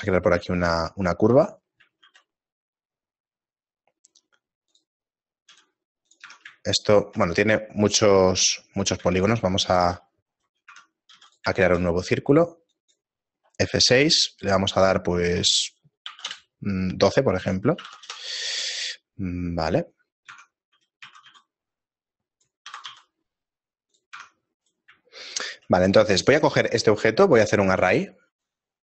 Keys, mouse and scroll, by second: 0.6 shift+middle click, 2.0 middle click, 4.0 shift+a, 5.5 s, 6.3 Tab, 6.7 shift+middle click, 9.0 x, 10.2 x, 10.4 right click, 10.7 Tab, 11.2 x, 11.6 shift+a, 14.0 F6, 20.3 Tab, 21.3 a, 21.3 s, 22.7 e, 24.2 Tab, 25.2 right click, 25.2 shift+middle click, 26.2 right click, 27.4 click.